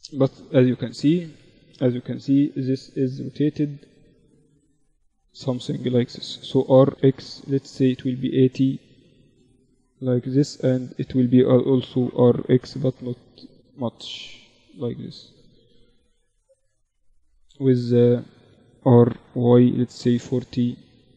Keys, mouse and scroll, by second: 1.4 Escape, 2.0 KP_1, 2.8 z, 5.6 r, 8.4 z, 9.6-11.6 right drag, 10.6 r, 13.6-16.0 drag, 15.3 z, 16.0 ctrl+z, 16.7-18.3 right drag, 17.8 r.